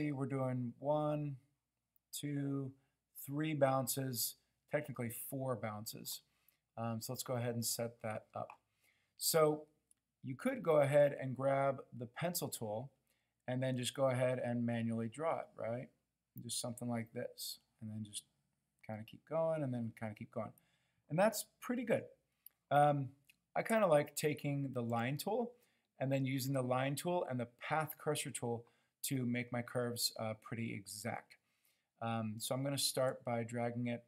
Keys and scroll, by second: 21.9 super+z.